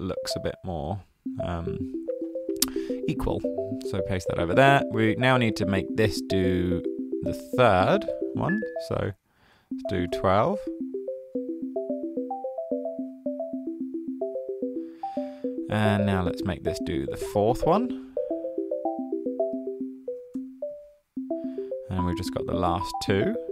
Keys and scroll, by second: 4.4 super+v, 9.7-10.6 typing, 19.9-20.7 typing.